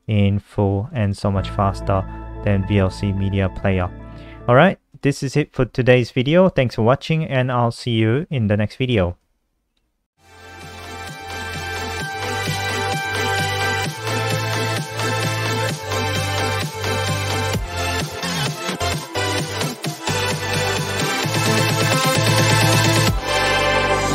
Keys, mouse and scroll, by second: 0.9 click, 3.8 click, 4.3 alt+F4, 4.8 click.